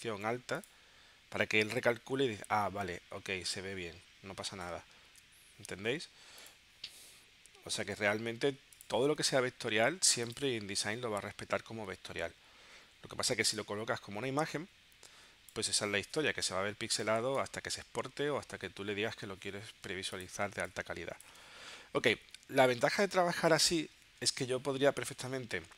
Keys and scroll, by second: 5.1 super+z, 12.0 w, 12.8 w, 17.4 shift+Right, 18.2 Down, 20.5 space, 24.1 super+Tab.